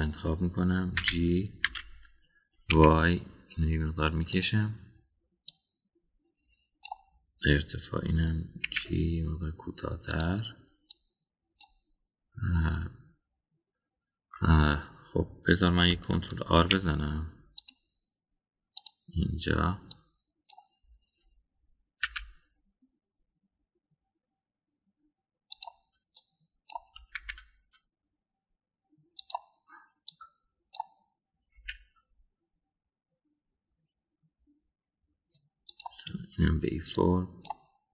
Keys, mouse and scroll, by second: 2.0 g, 6.5-7.9 drag, 9.6 g, 11.9-12.6 drag, 17.5 ctrl+r, 20.9 click, 23.1 g, 27.1-27.8 drag, 28.1 g, 31.1 click, 32.5 g.